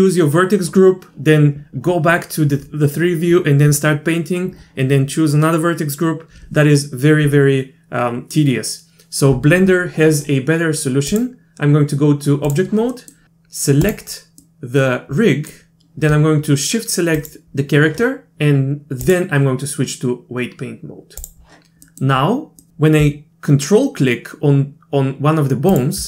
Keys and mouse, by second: 11.1-12.5 drag, 13.0 middle click, 14.1 click, 14.4-15.5 middle drag, 17.2 shift+click, 19.1-21.3 drag, 21.9 middle click, 22.7 middle click, 25.7 ctrl+click.